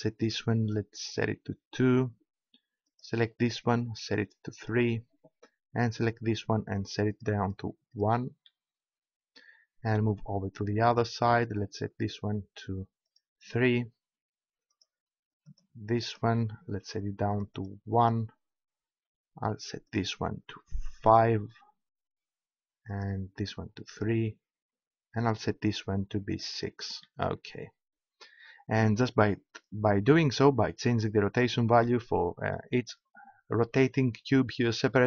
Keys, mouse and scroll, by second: 0.2-1.8 drag, 2.9-6.2 right drag, 4.6-6.2 drag, 10.9-12.6 right drag, 13.1 right click, 15.1-17.3 right drag, 17.3 middle click, 19.9 middle click, 20.4 right click, 23.0 right click, 32.5-33.8 middle drag.